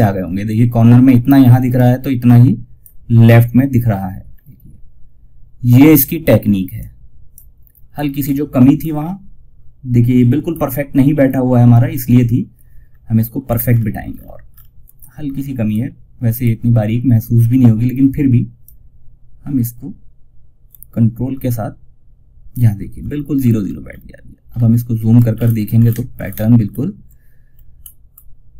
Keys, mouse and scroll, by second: 1.1-3.6 drag, 3.6 scroll down 1, 6.1 click, 7.2 scroll up 1, 12.7 alt+scroll down 1, 14.6-14.9 scroll up 1, 17.9-22.7 drag, 22.7 scroll down 1, 24.6 alt+scroll up 1, 25.6 alt+scroll up 1, 27.1 scroll up 1, 27.6 scroll up 1.